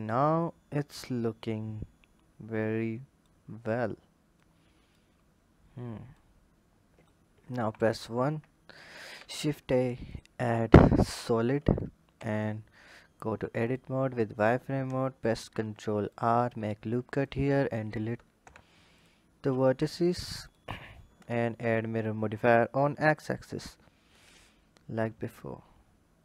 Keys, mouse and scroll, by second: 3.3-4.1 scroll down 2, 4.1 click, 5.0-5.9 scroll down 2, 5.9 click, 7.4 KP_1, 8.9 shift+a, 12.0 Tab, 13.4 click, 14.1 click, 15.0 ctrl+r, 17.0 click, 18.2 Delete, 19.5 Tab, 20.3-23.3 drag, 24.2 scroll up 1.